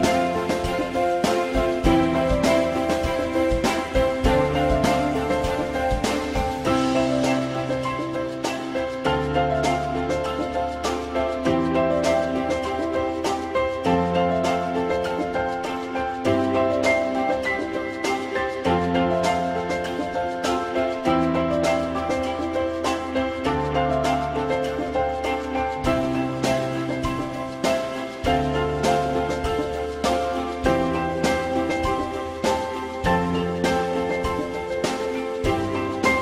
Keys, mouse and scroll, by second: 0.5 ctrl+z, 2.3 alt+middle click, 3.9 ctrl+y, 6.8 alt+middle click, 8.9 alt+middle click, 14.3 click, 15.6 alt+middle click, 20.5 alt+middle click, 22.2 alt+middle click, 25.4 alt+middle click, 26.2 ctrl+s, 27.2 alt+middle click, 35.0 F4, 35.6 F4.